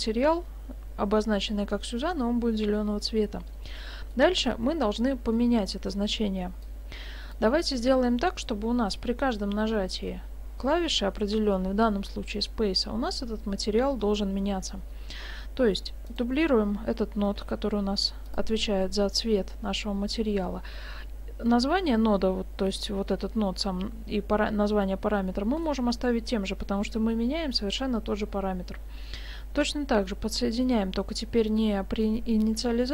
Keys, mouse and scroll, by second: 3.8 middle click, 5.3 middle click, 6.7 click, 16.1 right click, 17.4 shift+d, 18.8 middle click, 22.1-24.5 scroll up 1, 24.5-25.2 scroll up 2, 25.3 middle click, 29.7-30.2 scroll down 3, 30.1 middle click.